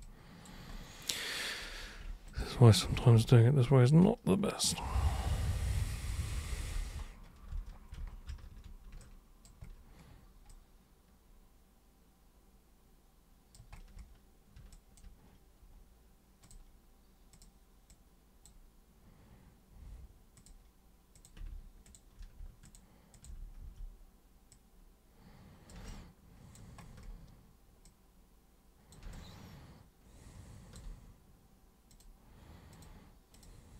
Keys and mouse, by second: 0.0-0.4 alt+super+drag, 2.3 ctrl+shift+super+click, 2.8 ctrl+shift+super+click, 3.2 alt+super+click, 4.6-6.1 alt+super+drag, 6.3 ctrl+super+z, 6.5 ctrl+super+z, 6.7 ctrl+super+z, 6.9 ctrl+super+z, 7.5 ctrl+super+z, 8.2 ctrl+super+z, 8.9 alt+super+click, 10.5-13.5 alt+super+drag, 14.7 alt+super+click, 16.4 super+click, 17.3 super+click, 17.9 super+click, 20.3 super+click, 21.1 super+click, 21.8 ctrl+shift+super+click, 22.6 ctrl+shift+super+click, 23.1 ctrl+shift+super+click, 23.6 super+w, 24.4-25.7 super+drag, 25.8 alt+super+click, 27.8 super+click, 29.1-30.7 alt+super+drag, 31.8 super+click, 32.7 super+click, 33.3 super+click.